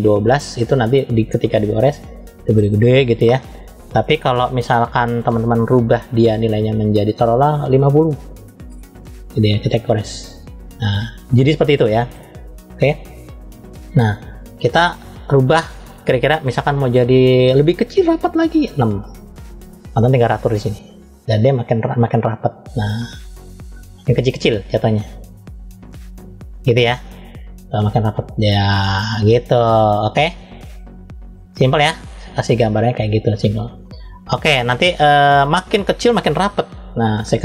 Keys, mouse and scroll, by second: 4.0 click, 6.3-9.1 drag, 9.9 click, 12.5 click, 15.0-19.3 drag, 20.4 click, 24.7 click, 30.1 click, 32.0 click, 34.8-37.4 drag.